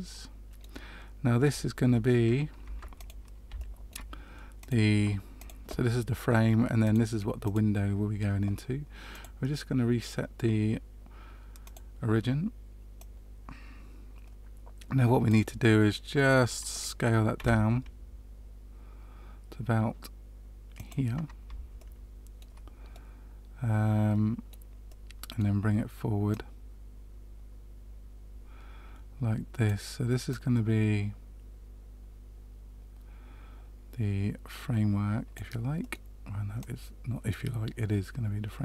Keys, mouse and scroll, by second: 2.6 Tab, 2.9 click, 3.5 shift+middle click, 4.5 click, 5.3 click, 6.8 click, 7.4 click, 9.1 click, 12.9 click, 15.5 middle click, 17.3 s, 21.7 shift+middle click, 22.9 middle click, 24.9 middle click, 26.2 click, 30.2 click, 35.7 middle click, 36.5 click.